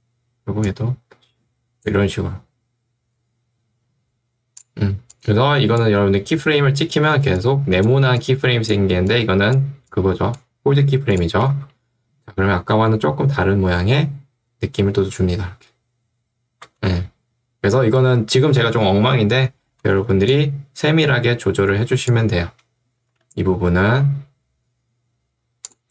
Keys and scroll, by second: 7.2 ctrl+2, 10.8 Escape, 11.6 space, 16.8 space, 20.0 ctrl+2, 23.2 Escape.